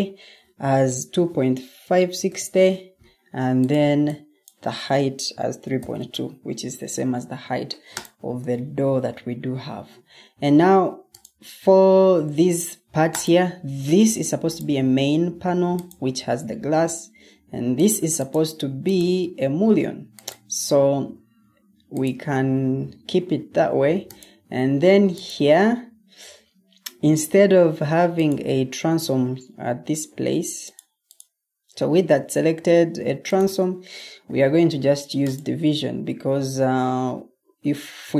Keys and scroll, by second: 1.1-2.5 typing, 5.0-6.3 typing.